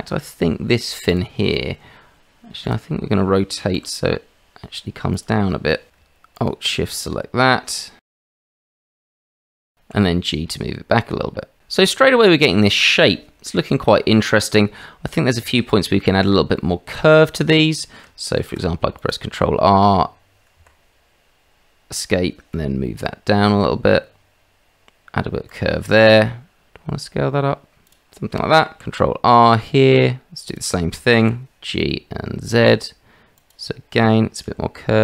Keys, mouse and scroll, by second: 1.1 click, 1.5 middle click, 2.6 click, 3.8 r, 5.9 ctrl+alt+z, 7.8 click, 8.6 s, 9.9 g, 11.6 r, 12.6-15.1 shift+middle drag, 16.5 shift+middle click, 17.2 shift+middle click, 18.4 ctrl+r, 22.5 g, 26.1 s, 28.8 ctrl+z, 28.8 ctrl+r, 31.2 g, 34.9 s.